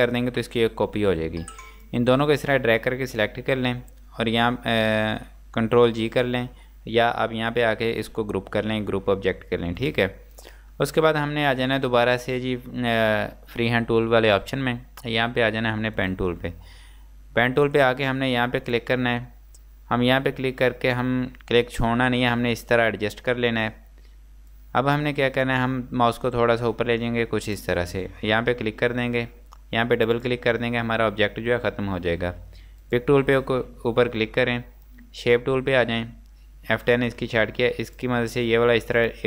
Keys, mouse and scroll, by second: 1.8 click, 9.8 click.